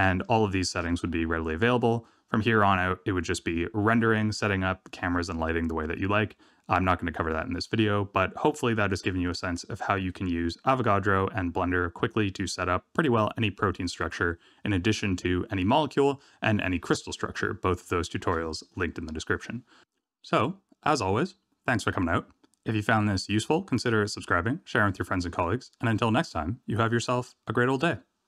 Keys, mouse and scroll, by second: 0.5 shift+middle click, 9.7-12.8 scroll down 1.